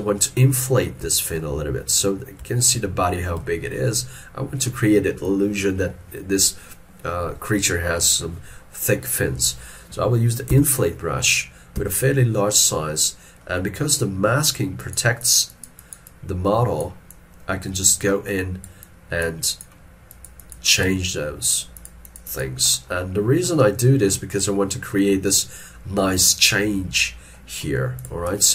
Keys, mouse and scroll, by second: 0.4 scroll down 1, 1.1 middle click, 1.6 shift+middle click, 2.4 scroll up 1, 2.5 shift+middle click, 3.5 shift+middle click, 10.6 i, 13.5 middle click, 15.2 double click.